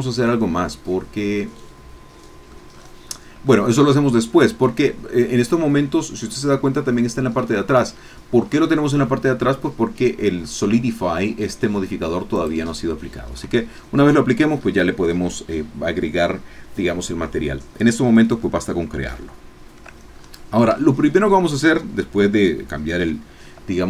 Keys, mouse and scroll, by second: 0.0-2.6 drag, 2.7-3.4 scroll up 5, 3.5-4.5 shift+middle drag, 4.9-6.1 middle drag, 6.2 scroll down 1, 7.4-8.6 middle drag, 8.7-9.8 shift+middle drag, 12.3 click, 13.3-14.3 scroll up 1, 14.5 scroll down 1, 18.6-19.0 scroll down 1, 19.2 shift+middle click, 20.1-20.6 shift+scroll up 3, 20.8 shift+middle click.